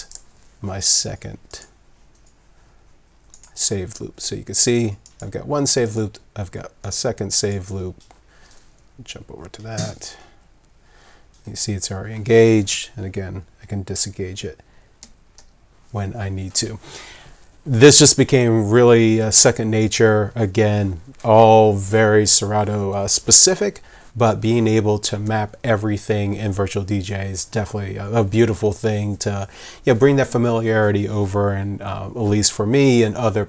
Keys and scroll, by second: 9.7 3, 15.0 ], 15.4 [.